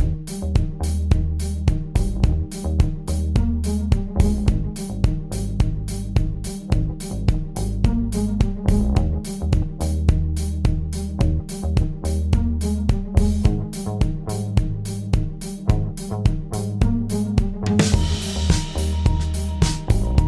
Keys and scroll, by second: 13.1 d.